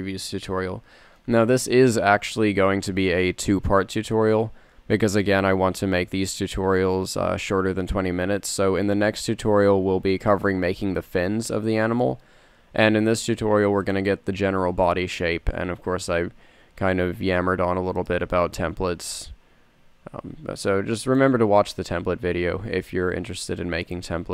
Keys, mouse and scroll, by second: 4.3 s, 9.5 g, 17.7 e, 19.6 g, 22.0 s.